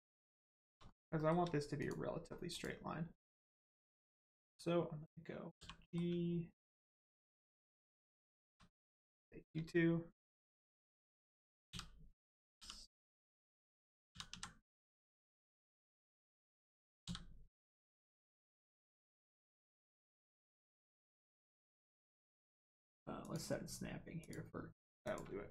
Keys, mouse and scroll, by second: 0.5 shift+middle click, 0.8 scroll up 1, 1.1 shift+middle click, 1.7 click, 1.8 click, 2.9 click, 3.5 1, 3.9 click, 5.5 g, 5.9 middle click, 7.1 ctrl+click, 7.9 click, 8.1 shift+click, 8.9 shift+click, 12.5 y, 13.1 right click, 14.1 s, 14.3 z, 15.1 right click, 17.0 s, 19.6 x, 20.3 right click, 21.1 click, 23.2 click.